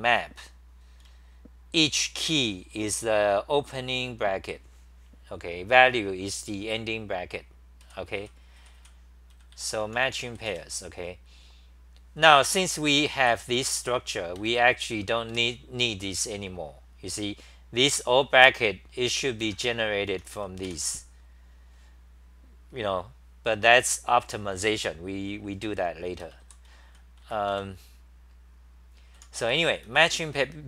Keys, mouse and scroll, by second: 1.0-11.0 typing, 12.7-15.8 typing, 14.4 ctrl+g, 19.4 ctrl+g, 19.5-20.8 typing, 26.0-27.7 typing, 29.0-30.6 typing.